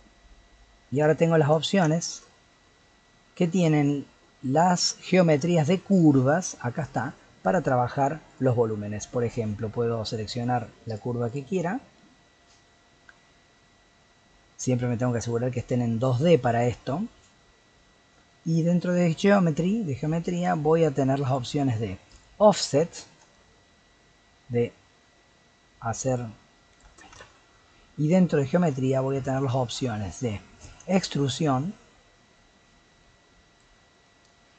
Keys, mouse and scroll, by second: 0.2-0.6 scroll up 5, 0.6-1.6 middle drag, 1.6 scroll up 3, 1.9-4.4 shift+middle drag, 4.4 click, 7.4 scroll up 1, 7.4-8.3 middle drag, 8.3 click, 8.8-10.9 middle drag, 10.9 click, 11.3 click, 11.5 click, 17.3-18.5 scroll down 5, 18.5-18.8 drag, 18.8-19.6 scroll down 3, 19.6-22.1 scroll down 2, 22.1-25.1 drag, 27.2 ctrl+z, 30.7-33.7 drag.